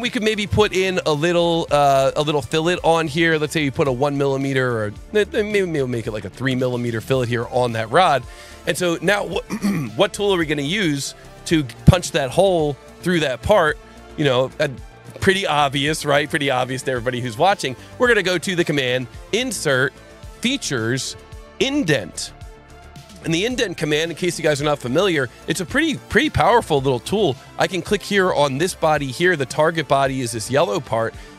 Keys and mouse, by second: 0.8 click, 3.6 KP_1, 3.8 KP_Enter, 5.3 KP_3, 5.5 KP_Enter, 6.4 KP_Enter, 7.4 click, 14.7 click, 17.6 click, 22.5 click, 27.3 click, 30.7 click.